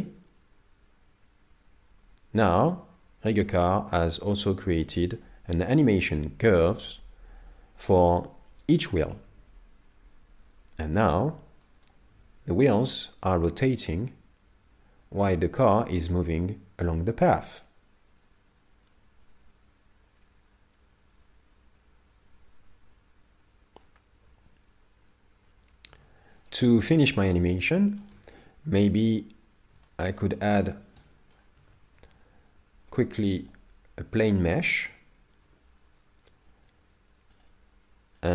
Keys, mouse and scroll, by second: 4.0-4.4 scroll down 8, 4.4 middle click, 5.7 middle click, 9.3 alt+a, 11.3 middle click, 25.9 alt+a, 26.3-26.8 scroll down 5, 26.8 middle click, 27.4-27.7 scroll down 2, 27.8 shift+middle click, 28.7 KP_7, 29.9 shift+middle click, 30.4 scroll up 4, 31.2 shift+middle click, 31.6 shift+a, 35.0 Tab, 35.4 Tab, 37.3 click, 38.2 click.